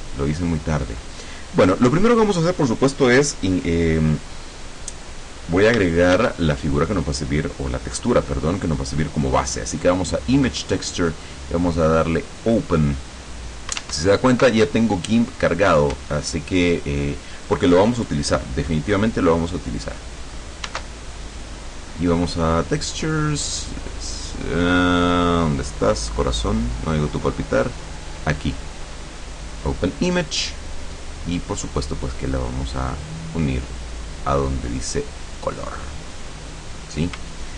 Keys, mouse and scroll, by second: 1.0-2.5 drag, 6.3 shift+a, 9.4 click, 10.8 click, 12.3 click, 13.9 alt+Tab, 20.8 alt+Tab, 22.7 click, 28.1 click, 29.5 click, 31.9-33.9 drag.